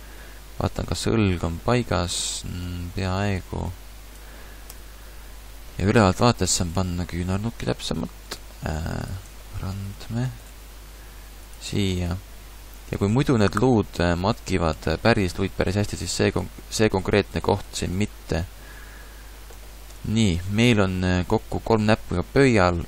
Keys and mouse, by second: 4.7 KP_7, 6.8 g, 8.4 g, 9.5 middle click, 11.6 g, 14.7 g, 17.2 click, 19.6 click.